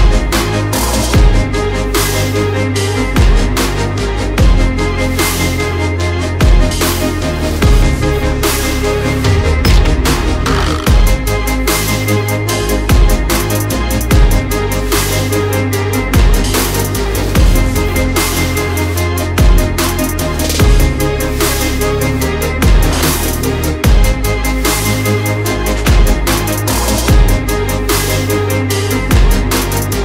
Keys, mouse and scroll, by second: 0.3 click, 3.9 alt+scroll up 1, 4.3 click, 4.5 double click, 6.6 click, 6.8 double click, 7.7 click, 9.5 click, 10.8 double click, 11.3 click, 11.6 double click, 12.4 click, 12.6 double click, 12.9 alt+scroll up 1, 13.2 alt+click, 15.3 Delete, 15.9 click, 16.1 Delete, 17.4 click, 21.5 double click, 22.1 click, 22.6 alt+scroll down 1, 23.2 click, 23.7 alt+scroll up 1, 24.2 alt+scroll down 1, 24.5 alt+scroll up 1, 24.8 click, 25.0 alt+scroll up 1, 25.5 click, 26.4 double click, 26.6 click, 26.8 double click, 27.1-27.5 alt+scroll up 1, 27.5 alt+scroll down 1, 28.2 alt+scroll up 1, 28.8 click, 29.3 double click, 29.8 alt+scroll down 1.